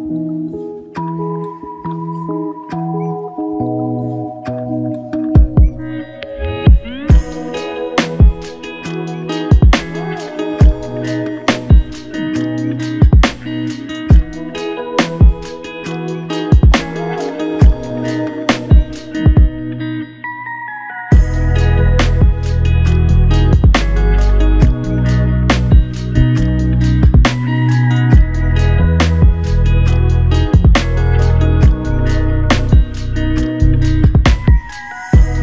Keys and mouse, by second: 0.7 alt+click, 1.9 double click, 4.0 alt+click, 5.9 double click, 11.0 double click, 13.0 alt+click, 13.9 shift+click, 14.9 shift+click, 18.9 double click, 20.1 alt+click, 23.4 alt+click, 27.1 typing, 28.5-29.7 typing.